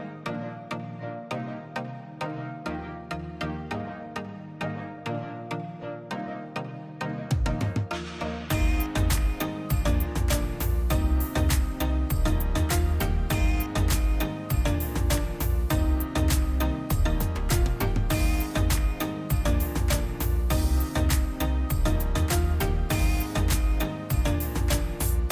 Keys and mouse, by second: 0.0-4.3 drag, 4.3-4.9 middle drag, 4.9 Tab, 5.3-7.1 middle drag, 7.1 2, 7.4 alt+click, 8.0-8.6 middle drag, 9.0 b, 12.3-13.8 middle drag, 14.2-17.3 drag, 17.3-18.1 middle drag, 18.1 click, 18.4-22.1 middle drag, 22.1-23.1 drag, 23.1 3, 23.4-24.3 drag, 24.3 middle click, 24.7 space.